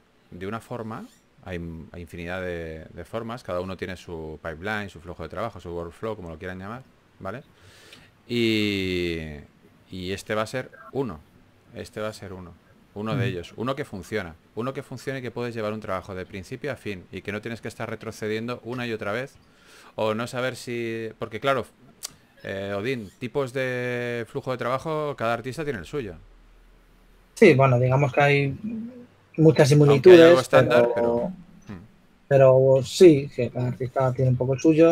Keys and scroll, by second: 0.1-1.0 typing, 2.4 typing, 8.5 3, 9.6 4, 12.3 typing, 17.4 typing, 19.6-21.1 typing, 22.7-23.5 typing, 24.6-25.7 typing, 28.0-30.7 typing, 32.4 typing, 34.3 s.